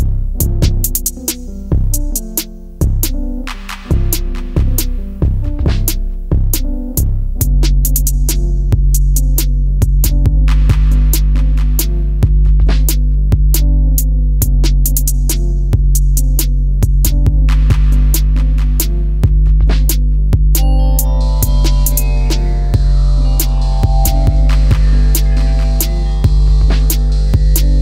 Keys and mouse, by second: 0.1 click, 1.9 shift+click, 2.7-3.7 drag, 4.3 click, 5.4-7.1 drag, 8.4 e, 10.1 click, 10.3 e, 10.8 click, 11.7 click, 11.7 e, 11.8 e, 12.8 click, 13.4 click, 14.1 e, 15.8 click, 16.0 e, 16.7 click, 20.1 right click, 20.7 e, 21.2 click, 21.3 e, 22.6 click, 23.8 click, 23.8 e, 24.7 click, 24.9 e, 25.5 click, 25.6 e, 26.3 click, 26.3 e, 27.2 click, 27.4 e.